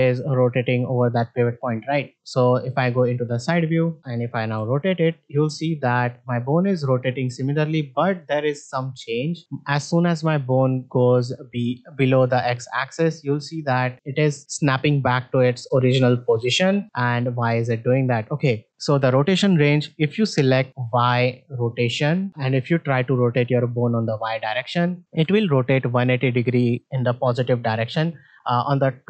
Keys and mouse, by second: 4.5 r, 25.1 r.